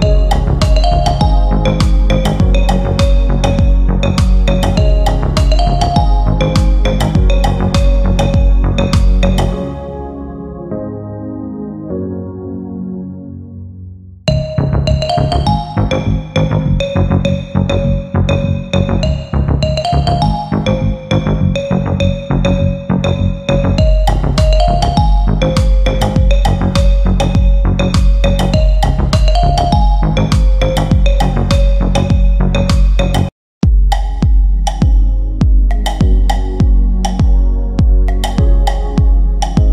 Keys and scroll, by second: 32.5 c, 32.8 e, 33.1 Escape, 34.1 shift+Page_Down, 38.7 g.